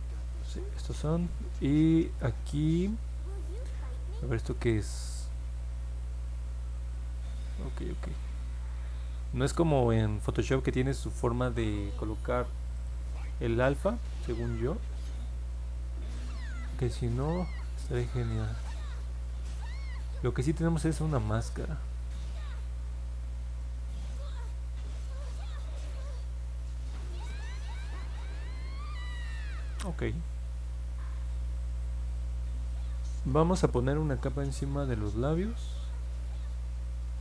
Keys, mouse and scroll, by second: 0.3 click, 12.7 right click, 29.6 click, 35.7 click.